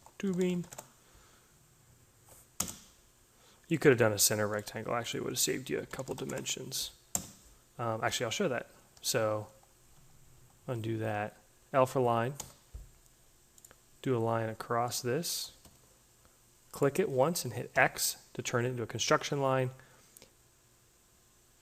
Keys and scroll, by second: 0.0-0.9 typing, 5.3-6.5 typing, 8.6 ctrl+z, 12.2 l, 15.5 Escape, 17.6 x.